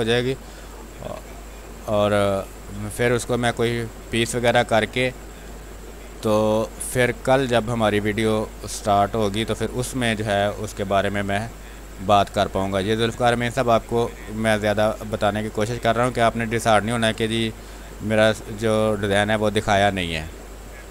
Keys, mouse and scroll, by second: 1.5 space, 2.2 click, 2.3 space, 2.6 click, 2.8 click, 2.8 space, 3.7-5.2 drag, 5.2 ctrl+z, 6.0-9.6 drag, 9.6 space, 9.9 click, 10.1 space, 11.1-15.6 drag, 15.6 space, 15.8 click, 16.1 space, 16.7 click, 17.7-20.1 drag, 20.1 space, 20.4 alt+click.